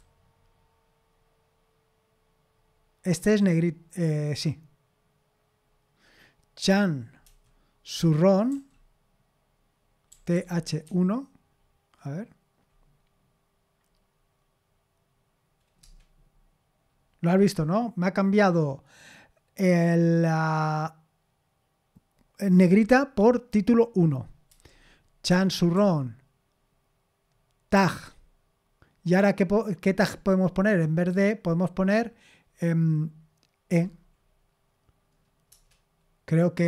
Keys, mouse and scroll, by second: 7.2 typing, 8.5 typing, 9.8-11.3 typing, 15.8 Return, 24.5-25.7 typing, 27.7 typing, 33.7 typing, 35.5 Return.